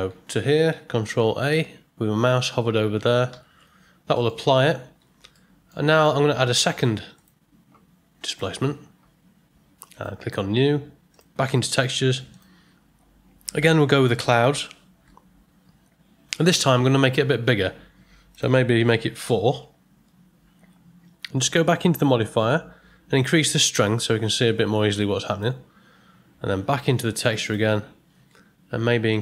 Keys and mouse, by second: 3.3 ctrl+a, 4.1 middle click, 5.3-5.7 shift+middle drag, 5.9 ctrl+middle click, 7.1-8.3 drag, 9.9 click, 11.1 click, 12.3-14.3 drag, 18.3-20.9 drag, 23.7-25.5 drag, 27.4 click, 29.1-29.2 drag.